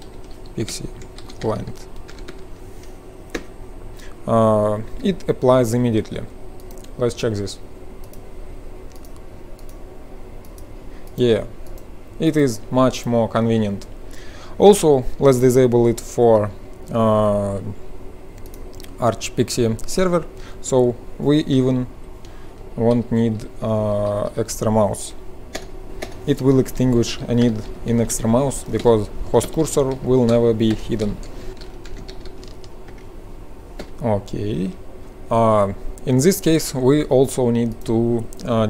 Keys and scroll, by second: 0.0-2.7 typing, 3.3 Return, 4.8 F12, 20.0 F12, 21.4 Return, 21.8 Up, 22.8 Left, 23.0 Left, 23.2 Left, 24.0 Left, 24.4 Left, 25.4-33.8 typing, 33.8 F12.